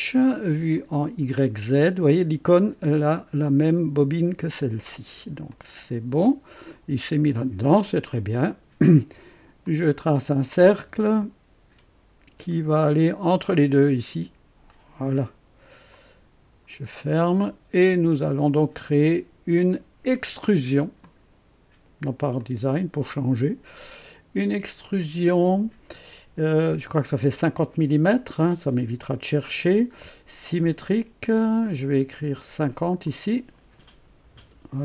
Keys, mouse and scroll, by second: 0.7 click, 5.4 click, 9.6 click, 10.8 &, 12.4 click, 14.6 click, 15.9 click, 16.8 scroll down 1, 17.3-18.5 drag, 20.9 click, 22.3 click, 24.5 click, 30.4 click, 33.0 click, 34.1 KP_5, 34.3 KP_0.